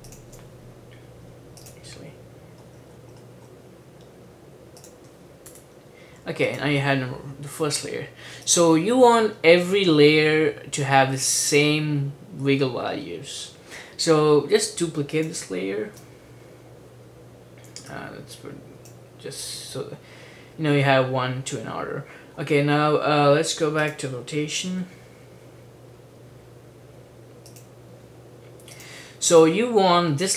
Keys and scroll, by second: 5.6 BackSpace, 15.9 super+d, 24.8 r.